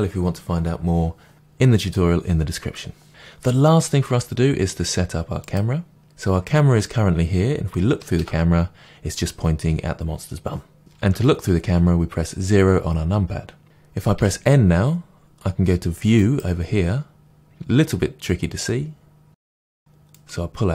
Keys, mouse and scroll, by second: 8.1 KP_0, 11.1 KP_0, 14.1 n, 16.1 click, 20.1-20.7 drag.